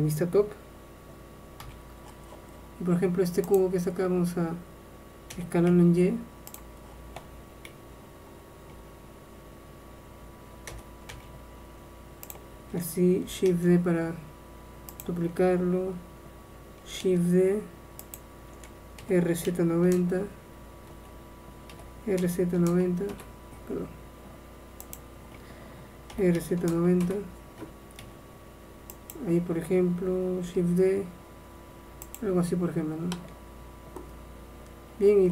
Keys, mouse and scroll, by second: 1.7 n, 3.7-6.6 drag, 5.4 s, 7.8 y, 8.9 y, 10.8 s, 13.6 shift+d, 17.1 shift+d, 19.1 r, 19.5 z, 19.9 KP_9, 20.3 KP_0, 21.0 KP_Enter, 21.8 r, 22.3 z, 22.7 KP_9, 22.8 KP_0, 23.2 KP_Enter, 24.9-26.7 drag, 26.2 r, 28.1 g, 30.7 shift+d, 32.7-34.3 middle drag.